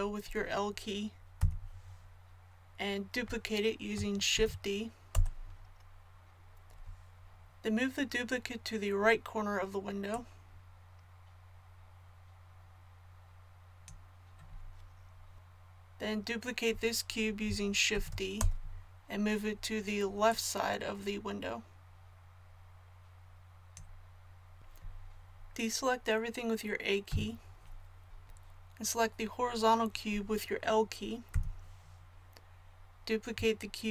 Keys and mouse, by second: 1.3 l, 4.3 shift+d, 10.1-12.0 middle drag, 15.3 ctrl+z, 17.9 shift+d, 20.3-27.1 drag, 27.1 a, 31.2 l.